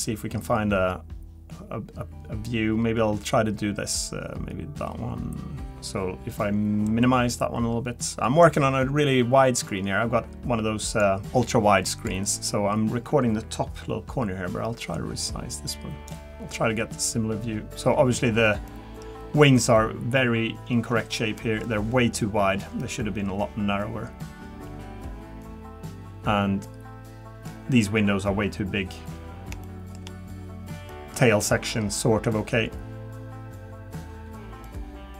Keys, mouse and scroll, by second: 16.3 middle click, 16.3-17.0 scroll up 1, 19.9 middle click, 19.9-20.4 scroll down 1.